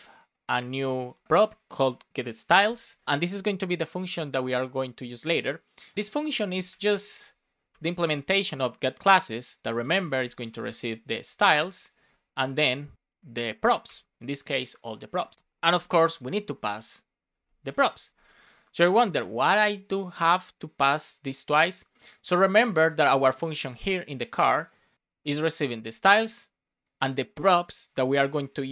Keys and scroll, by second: 2.6 shift+[, 7.6 Return, 8.1 shift+9, 11.5 Right, 12.0 shift+9, 13.8 Return, 15.0 Right, 15.3 space, 15.7 shift+[, 18.0 Right, 18.1 space.